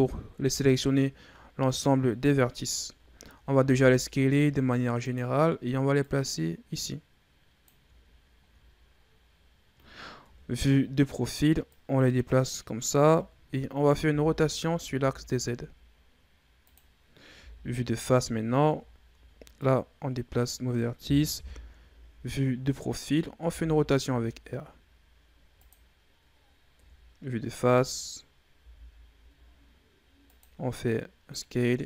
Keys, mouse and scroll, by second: 0.4 KP_1, 1.4-2.1 scroll down 2, 2.1-2.6 ctrl+scroll up 4, 2.6-3.5 scroll down 1, 3.5 s, 5.9-8.0 drag, 8.0-10.1 scroll up 4, 10.1 KP_3, 11.5-13.0 drag, 13.0-13.9 ctrl+scroll up 5, 13.9 r, 17.2 KP_1, 18.4 scroll down 1, 18.7 shift+scroll up 2, 19.4-21.2 drag, 21.2 KP_3, 22.4-23.4 scroll up 3, 23.4 r, 26.6 KP_1, 27.7-28.4 scroll down 4, 28.4 s, 31.2-31.8 drag.